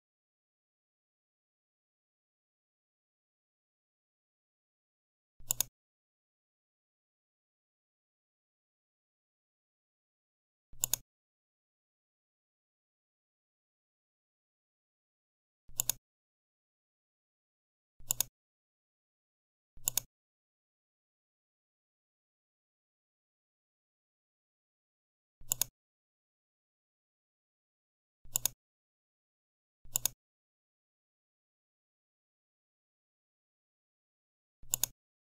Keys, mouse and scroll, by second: 0.1-1.2 typing, 1.3 Return, 5.4 click, 10.7 click, 15.6 click, 18.0 click, 25.4 click, 28.2 click, 29.8 click, 34.6 click.